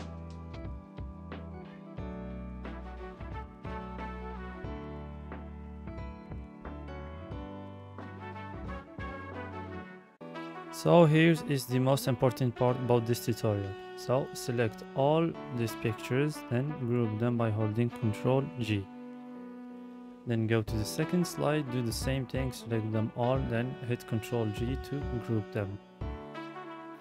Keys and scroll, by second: 13.9 ctrl+g, 22.2 ctrl+g.